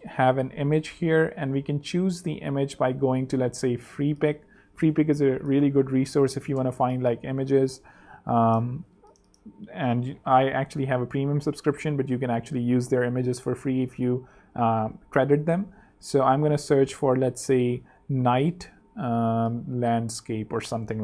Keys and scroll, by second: 2.7 super+t, 3.3-4.1 typing, 17.5-20.9 typing.